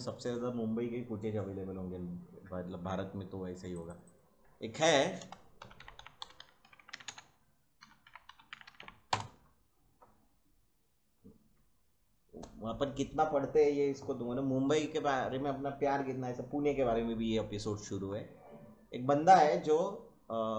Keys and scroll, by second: 5.2-9.3 typing.